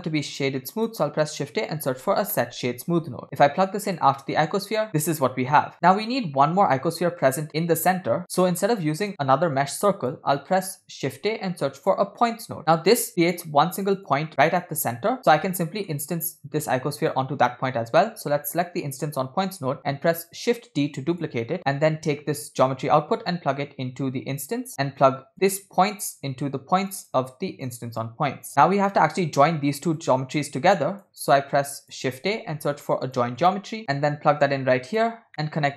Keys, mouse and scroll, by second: 4.6 click, 5.2-5.7 drag, 5.7 middle click, 5.7-6.1 scroll down 2, 6.6-7.4 scroll up 2, 8.1 scroll down 5, 8.2 middle click, 8.8 click, 9.4 click, 10.4 middle click, 11.3 shift+a, 12.6 middle click, 12.6 scroll down 2, 12.7-13.1 scroll up 2, 13.1-14.1 drag, 15.2 middle click, 15.6 scroll down 2, 15.7 middle click, 16.6 click, 17.0 click, 17.8 scroll down 1, 18.0 middle click, 19.8 shift+d, 21.5 scroll up 4, 21.6 middle click, 22.7-24.7 drag, 25.3 click, 26.2-27.1 drag, 27.7-28.5 drag, 28.5 scroll down 4, 28.7-29.1 middle drag, 30.1-31.1 drag, 31.7 click, 32.3 shift+a, 33.8 shift+a, 35.3 middle drag.